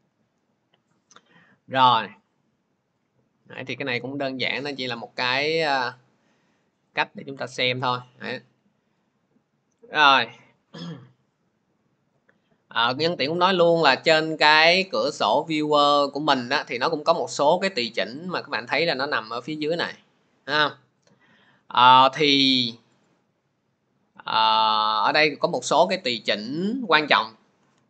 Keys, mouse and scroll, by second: 4.4 click, 5.6 click, 16.7 middle click, 22.9 click, 24.6 click, 24.9 click, 27.0 middle click.